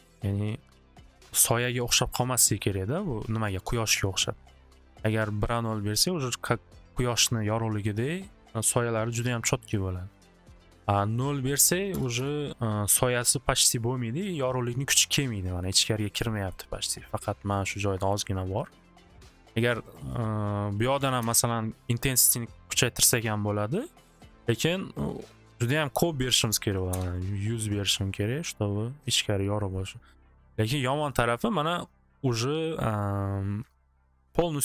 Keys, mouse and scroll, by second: 2.6 middle click, 3.6-4.9 middle drag, 6.4 middle click, 10.2 middle click, 11.5 click, 11.9 0, 12.2 Return, 15.3 middle click, 16.5 middle click, 19.9 click, 20.1 click, 21.0 typing, 21.2 Return, 25.9-27.1 typing, 26.2 click, 26.3 click, 31.3 middle click, 33.2 middle click.